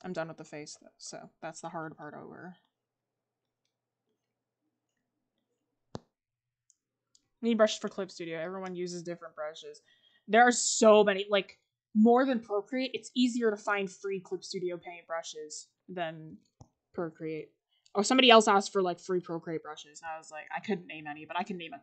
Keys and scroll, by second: 10.8 ctrl+z.